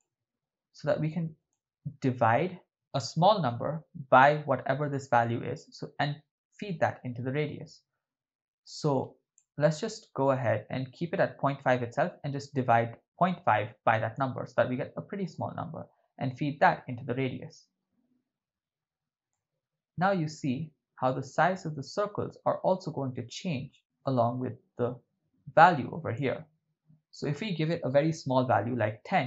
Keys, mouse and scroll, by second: 1.0 click, 8.6 click, 12.7 click, 15.3-16.7 drag, 19.3-26.4 drag, 27.2-29.2 drag.